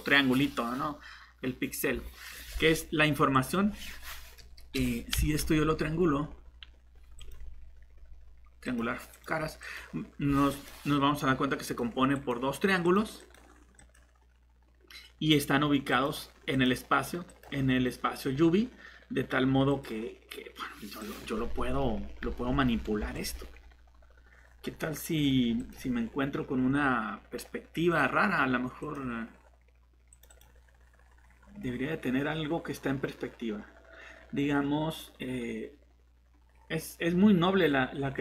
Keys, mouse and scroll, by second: 5.2 a, 15.0 a, 22.2 g, 22.9 Escape.